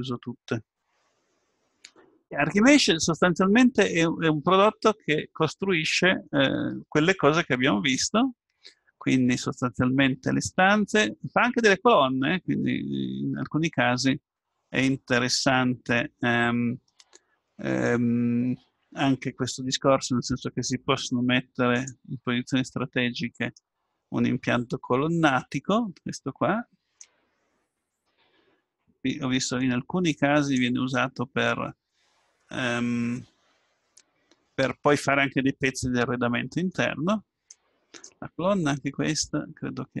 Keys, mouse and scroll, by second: 16.2-19.6 middle drag, 21.8-25.5 drag, 27.0-28.8 drag, 29.6-31.2 drag, 29.6 right click, 31.2-32.7 middle drag, 37.5-39.5 drag, 39.6-40.0 scroll down 1.